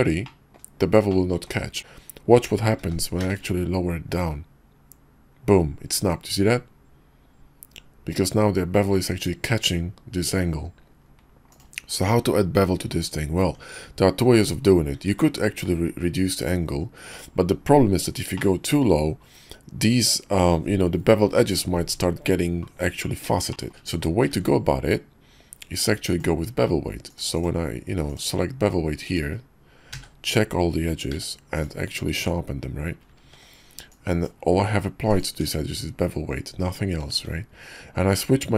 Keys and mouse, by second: 0.2-0.6 drag, 1.1-1.5 drag, 1.8 Tab, 2.7 g, 13.4 Tab, 14.9 ctrl+`, 18.3-18.7 shift+middle drag, 23.5 shift+middle click, 23.7 Tab, 24.3 ctrl+`, 29.9 a, 31.1 q, 32.2 Tab, 33.2 ctrl+`, 35.3 Tab, 36.5 Tab, 37.1 ctrl+`.